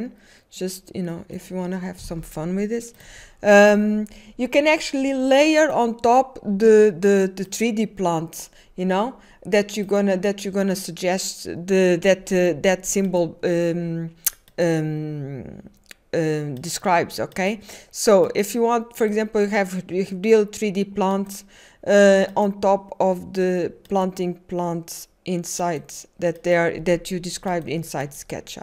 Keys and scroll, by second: 0.4-1.8 typing.